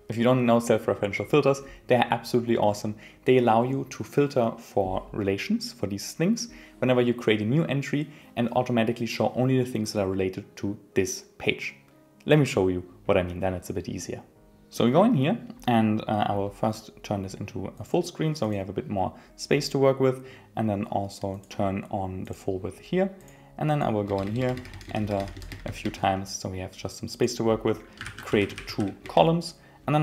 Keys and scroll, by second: 24.0 Return, 29.0 Return.